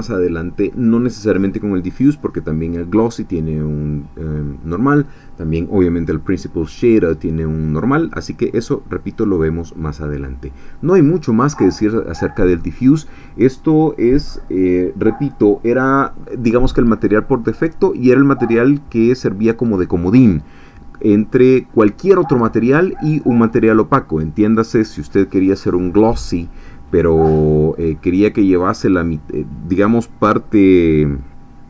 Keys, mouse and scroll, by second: 8.6 click.